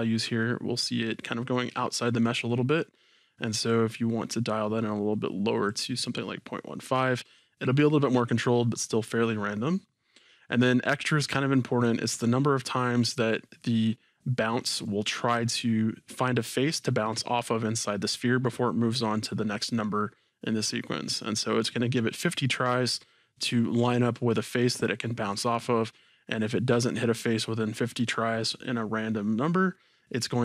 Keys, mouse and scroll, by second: 3.7 click.